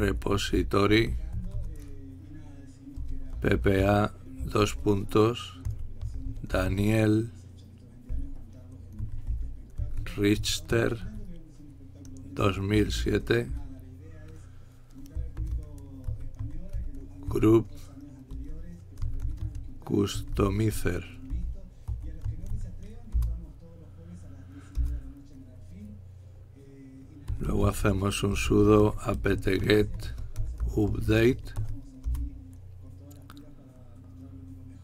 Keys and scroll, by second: 0.0-1.9 typing, 3.3-13.7 typing, 15.4-23.7 typing, 24.8-25.5 typing, 27.8-32.2 typing.